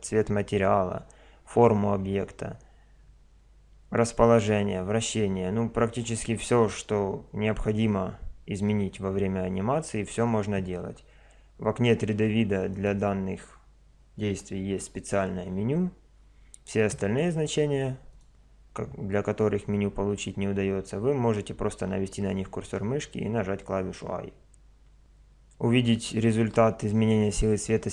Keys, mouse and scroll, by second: 12.7 right click, 14.4 click, 14.7 i, 18.2-19.8 drag.